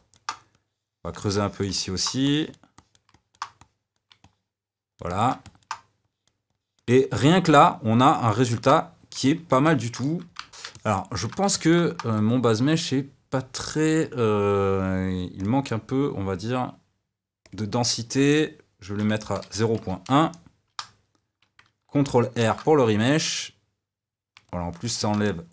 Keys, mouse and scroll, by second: 0.5-1.7 drag, 1.7 middle click, 2.2 click, 3.1 middle click, 3.5 click, 4.2-6.0 middle drag, 6.0 click, 6.9-20.6 middle drag, 20.6-23.8 drag, 23.8 ctrl+r, 24.4-25.5 middle drag.